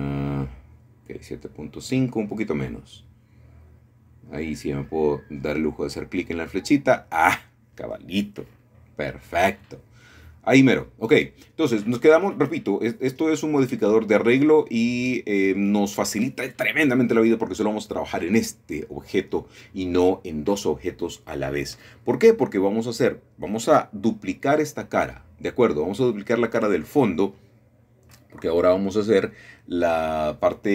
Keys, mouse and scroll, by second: 0.0-1.4 drag, 2.2 click, 3.4 KP_2, 3.6 KP_Decimal, 3.8 KP_5, 4.0 Return, 6.2 click, 7.8 KP_7, 8.1 KP_Decimal, 8.2 KP_5, 8.4 Return, 12.1 click, 12.6-14.2 drag, 14.5-15.3 scroll up 1, 15.3 shift+middle click, 17.0 shift+middle click, 18.3-19.7 shift+middle drag, 18.6-19.7 scroll up 1, 21.0 middle click, 21.9 middle click, 22.3 scroll down 1, 22.9 shift+middle click, 23.1 scroll down 1, 23.3 shift+middle click, 23.5 shift+middle click, 24.5 middle click, 25.7 click, 26.4-27.3 scroll down 1, 27.9 middle click, 28.5-29.7 scroll up 2.